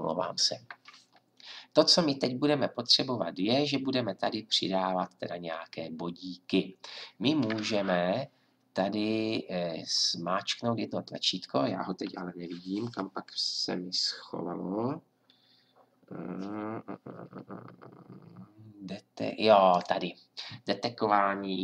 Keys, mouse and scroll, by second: 19.7-21.5 drag.